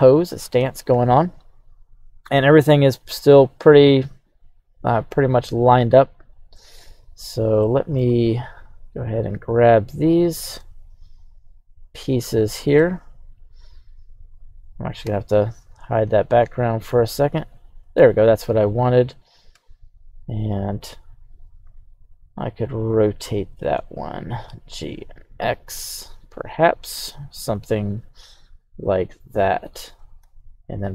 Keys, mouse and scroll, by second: 0.0 middle click, 0.9 KP_1, 1.8-3.0 scroll up 2, 3.9 right click, 4.5 right click, 4.9 right click, 6.0 shift+right click, 7.6-8.0 middle drag, 8.1-8.5 scroll down 1, 8.5-9.0 drag, 10.3 right click, 11.1-11.6 shift+right drag, 11.9 shift+right click, 13.4 right click, 14.2 right click, 15.0 h, 15.8 right drag, 16.2 shift+right click, 16.6 shift+right click, 17.0 shift+right click, 17.8 right click, 19.5 KP_1, 21.7 r, 24.2 click, 24.5 g, 24.9 x, 26.8-27.2 drag, 27.6 right click, 30.2 alt+h.